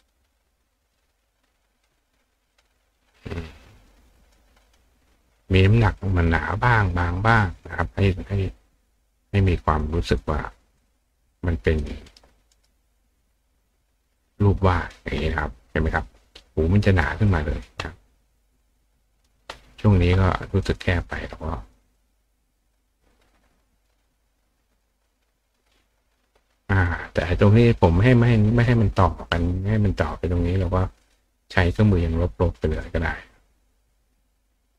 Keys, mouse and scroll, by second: 0.0 click, 0.9-1.6 drag, 1.8 click, 2.5 click, 3.8 click, 4.6 click, 5.9 click, 7.3 click, 8.5 click, 10.2 click, 10.8 click, 11.8 click, 12.0 right click, 12.5 right click, 14.1 click, 17.2 click, 18.7 click, 20.6 click, 21.6 click, 21.9 click, 23.7-24.8 drag, 25.4 click, 26.8 click, 29.4 click, 31.0 click, 32.8-34.7 drag.